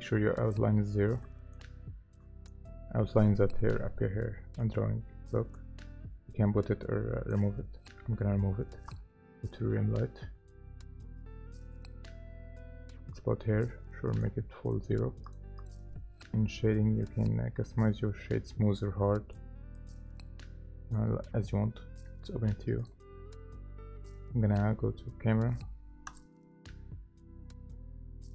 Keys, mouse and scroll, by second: 2.8 scroll up 1, 8.0-8.5 scroll down 1, 15.6 double click.